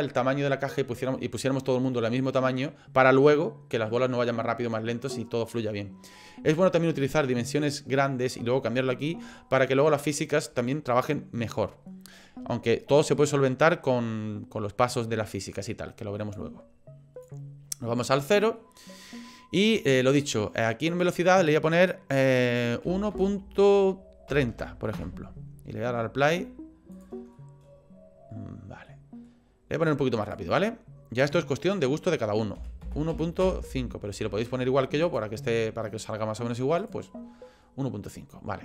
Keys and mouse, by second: 16.3 click, 18.6-20.9 middle drag, 20.9-25.3 drag, 25.7 middle click, 26.9 click, 27.4 middle click, 29.0 middle click, 30.3 click, 31.2-33.8 drag, 35.1 click, 35.4 middle click.